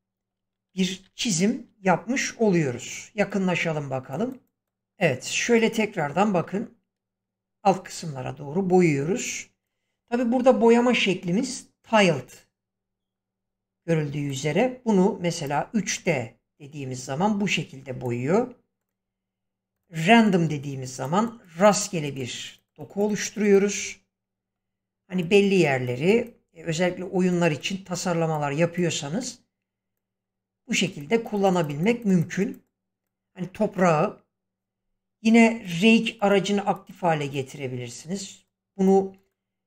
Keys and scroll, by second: 1.0 ctrl+1, 4.8 ctrl+1.